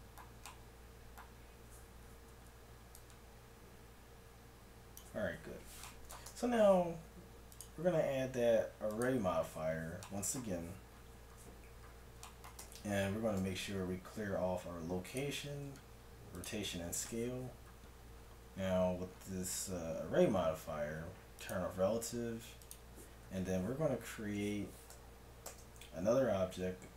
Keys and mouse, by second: 3.0-4.7 drag, 4.7 middle click, 6.3 Tab, 9.4 middle click, 12.6 Tab, 13.4 ctrl+a, 15.6 ctrl+a, 21.5-24.4 drag, 25.5 shift+a.